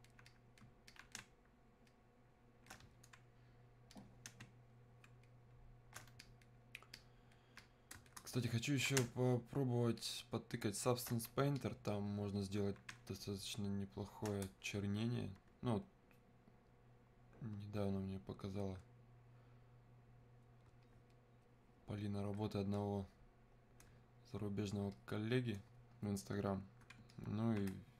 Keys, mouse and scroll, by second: 1.2 space, 1.9 click, 2.2 space, 4.0 click, 4.5 space, 5.3 click, 5.4 space, 6.2-8.5 alt+drag, 9.0 space, 10.0 click, 10.1 space, 11.6-13.1 alt+drag, 13.1 space, 13.6 click, 13.6 space, 14.6-27.9 shift+drag.